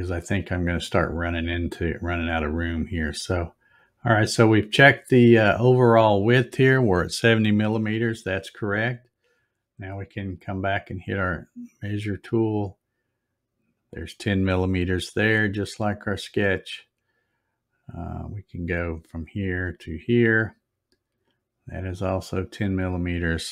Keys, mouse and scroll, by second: 2.4 click, 3.7-5.3 drag, 10.2 click, 12.6 click, 13.7 click, 19.0 click, 20.1 click, 22.4 click.